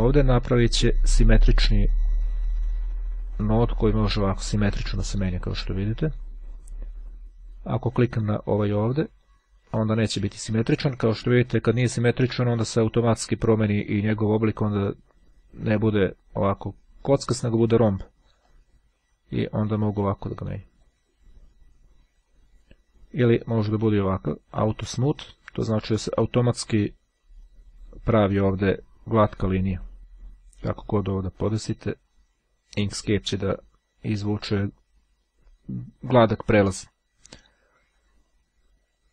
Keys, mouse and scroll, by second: 2.1-6.3 drag, 7.8-9.5 drag, 11.3-11.8 ctrl+scroll up 2, 18.6-21.2 drag, 24.7 click, 29.9-31.6 drag, 32.0-34.1 drag, 38.0-39.1 ctrl+scroll down 2.